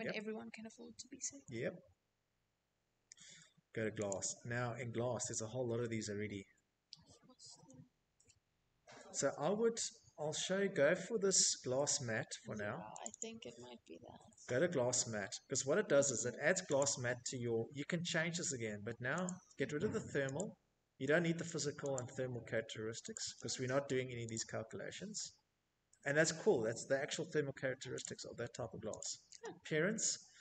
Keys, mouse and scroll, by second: 1.3 click, 2.1-4.9 scroll, 4.9-6.3 scroll, 6.6 scroll, 7.4 scroll, 10.2 click, 10.4 click, 14.0 click, 16.4 click, 16.7 click, 17.6 click, 19.2 click, 20.3 click, 25.2 click, 26.2 click, 28.2 click.